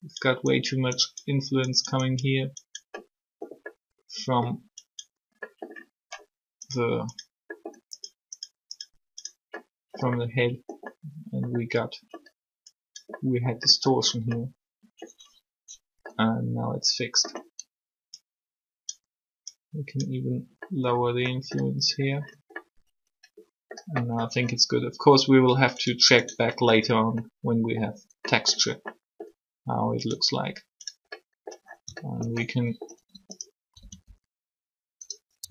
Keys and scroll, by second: 32.9-33.7 typing, 35.0-35.5 typing.